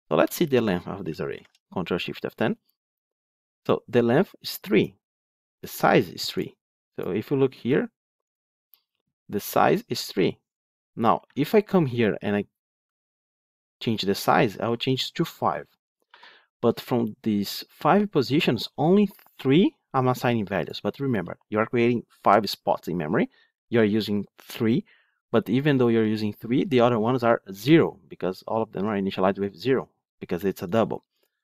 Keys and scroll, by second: 1.2 ctrl+shift+F10.